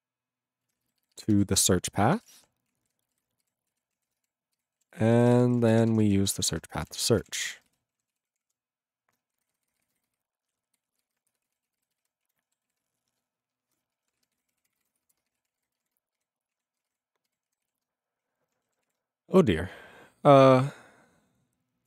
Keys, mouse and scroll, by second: 0.6 ctrl+e, 1.0 alt+b, 1.1 alt+b, 1.3 alt+d, 1.6-3.6 typing, 3.7 ctrl+e, 3.9 ctrl+a, 4.1 ctrl+space, 4.6 ctrl+g, 5.0 ctrl+s, 5.1 ctrl+n, 5.6 alt+f, 5.8-7.1 typing, 7.2 ctrl+a, 7.3 ctrl+p, 7.4 ctrl+e, 7.6 ctrl+n, 7.6 ctrl+n, 7.7 ctrl+g, 8.2 ctrl+s, 8.3 ctrl+p, 8.4 ctrl+p, 9.4 alt+f, 9.5 alt+f, 9.6 alt+f, 9.8 alt+f, 10.0-10.7 alt+f, 11.0 alt+f, 11.3-12.6 typing, 12.7 ctrl+s, 14.1-16.3 typing, 16.5 ctrl+a, 16.8 ctrl+space, 17.3 ctrl+g, 17.8 ctrl+s, 18.8 ctrl+s.